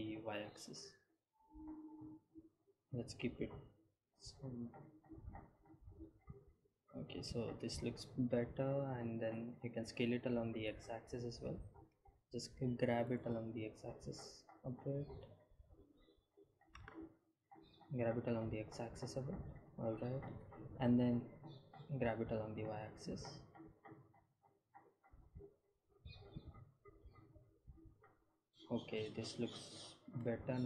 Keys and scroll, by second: 0.0 s, 0.6 x, 1.9 u, 2.3 y, 11.3 s, 12.1 y, 13.0 x, 14.6 g, 14.9 y, 15.4 shift+x, 19.8 g, 20.0 x, 22.5 g, 23.3 y.